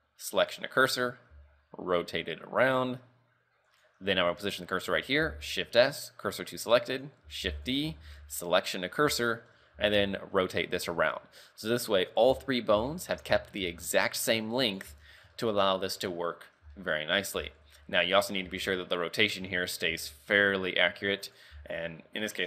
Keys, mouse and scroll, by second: 1.0 scroll up 3, 1.4 r, 4.4 right click, 5.3 shift+s, 7.0 right click, 7.5 shift+d, 8.1 shift+s, 9.8 r, 12.4 z, 13.0 shift+middle click, 13.4 z, 13.8 r, 15.0 z, 15.1 scroll down 3, 15.4 shift+middle click, 15.9 z, 16.1-16.4 scroll down 2, 16.3 scroll up 3, 16.9 shift+middle click, 17.1 scroll up 2, 17.5 z, 17.7 r, 18.6 z, 20.0 r, 21.8 z, 21.9-22.4 scroll down 5.